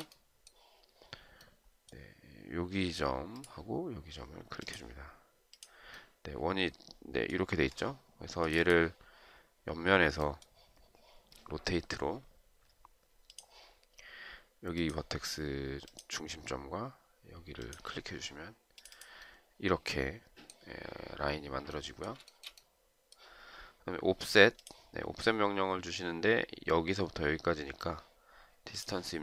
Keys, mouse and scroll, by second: 0.1 shift+right click, 22.6 shift+right click.